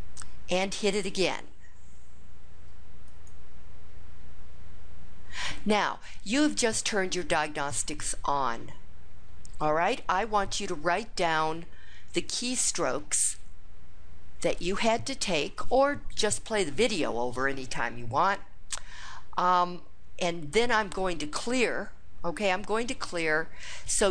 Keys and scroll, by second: 3.0 Return, 13.1 Down.